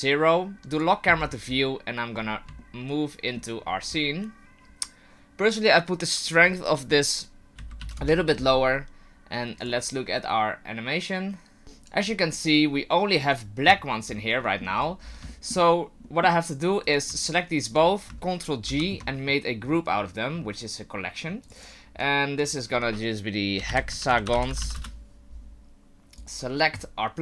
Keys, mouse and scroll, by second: 0.7 click, 1.1-2.2 scroll up 7, 2.2 scroll up 2, 2.6 shift+middle click, 6.3 click, 9.6 click, 13.3 click, 14.1-16.0 scroll down 10, 14.4 middle click, 15.3 shift+middle click, 16.0 middle click, 16.8 right click, 17.2 shift+right click, 18.6 ctrl+g, 21.4 click, 26.2 right click.